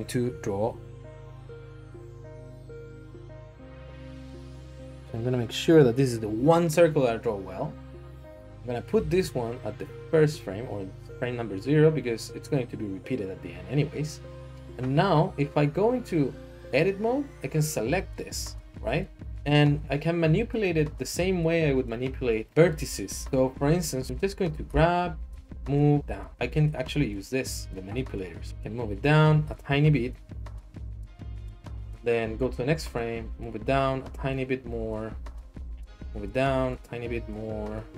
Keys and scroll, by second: 9.0 g, 14.5 Tab, 15.1 Tab, 24.7 g, 25.3 z, 32.4 Right, 35.7 Right.